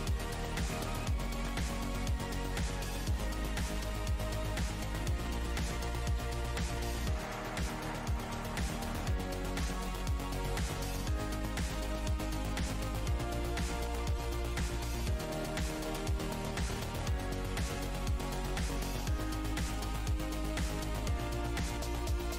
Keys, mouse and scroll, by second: 0.5 shift+right click, 0.9 right click, 1.5 click, 1.9 alt+scroll down 1, 6.3 alt+click, 6.9 click, 7.1 alt+click, 8.9 alt+click, 9.8 alt+click, 10.4 alt+click, 11.1 click, 12.3 ctrl+shift+h, 13.1-13.4 alt+scroll up 1, 15.2 alt+scroll down 1, 16.1 click, 16.7 alt+click, 17.5 click, 19.3 alt+click, 21.6 alt+click.